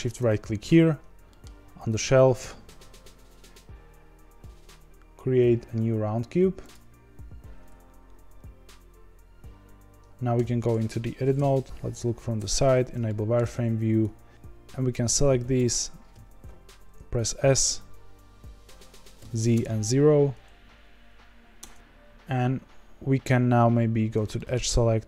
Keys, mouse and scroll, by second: 0.0-0.8 shift+right drag, 0.8-1.2 scroll up 4, 1.2-1.8 middle drag, 1.8-6.7 scroll up 6, 10.3 Tab, 11.3 KP_1, 12.3 z, 12.6-13.0 scroll up 5, 13.0-14.3 shift+middle drag, 14.3 click, 14.3 click, 15.5 click, 16.1 s, 21.7 KP_1, 24.1 2, 24.3 middle click.